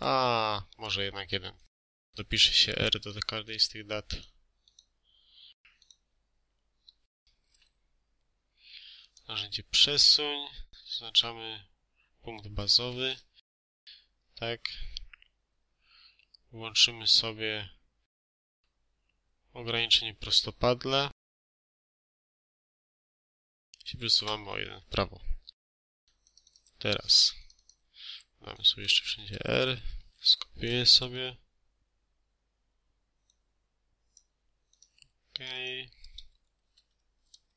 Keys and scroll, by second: 23.6 1, 24.0 Return, 28.9 r, 29.7 ctrl+a, 30.4 ctrl+c, 36.5 ctrl+a, 37.1 ctrl+v.